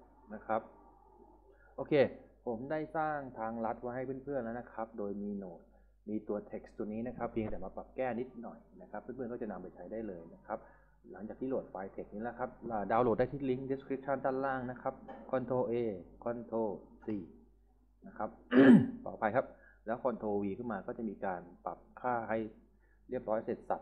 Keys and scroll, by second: 14.8 ctrl+a, 17.1 ctrl+c, 19.9 ctrl+v.